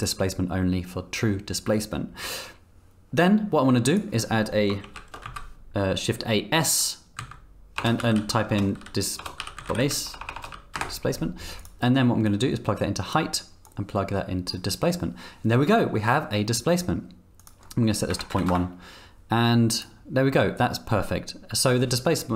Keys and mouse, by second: 4.8 shift+a, 10.2 BackSpace, 12.3-13.1 drag, 13.6-14.5 drag, 17.4-19.1 drag, 19.8 click.